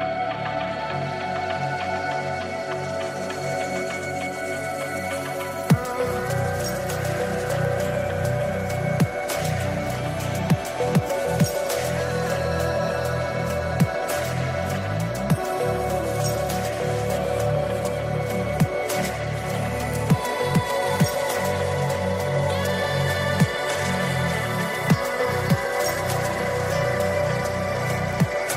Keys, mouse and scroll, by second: 0.0 click, 1.8 click, 7.4 click, 10.4 click, 13.7 click, 14.7 click, 18.1 click, 18.9-19.8 scroll down 2, 19.8 click, 21.7 shift+d, 22.2 Return, 23.9 click, 25.1 click, 27.8 click.